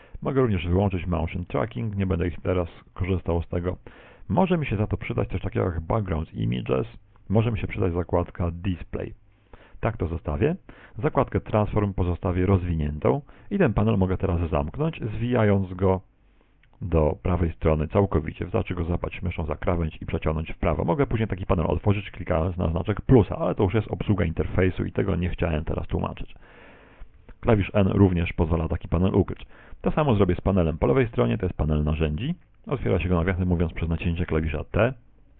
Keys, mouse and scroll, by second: 1.4 click, 5.6 click, 7.8 click, 10.0-10.4 scroll up 4, 12.0 scroll up 2, 15.4 click, 23.0 click, 27.3 n, 31.4 click.